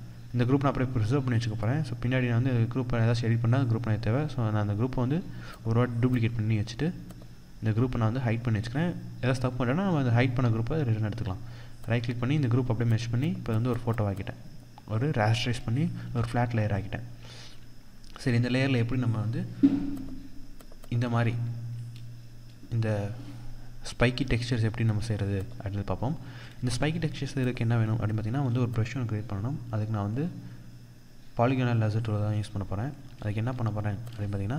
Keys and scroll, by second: 15.4 ctrl+=, 16.8 ctrl+0, 19.8 ctrl+0, 24.2 ctrl+0, 31.7 ctrl+-.